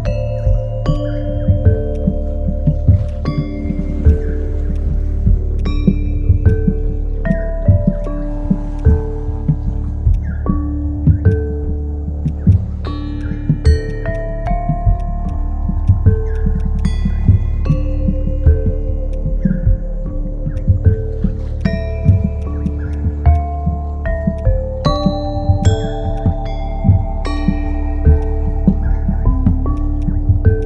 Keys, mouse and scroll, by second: 9.6-10.3 typing, 16.6 right click, 18.3 ctrl+z, 19.0 typing, 21.2-22.5 typing.